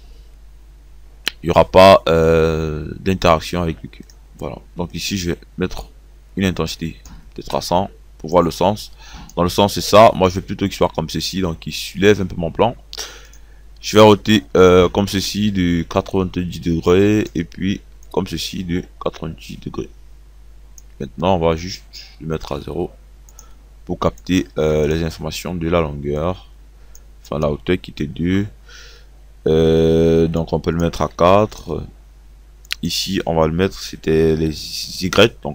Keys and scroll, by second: 28.2 KP_2, 31.3 KP_4, 34.9 KP_2.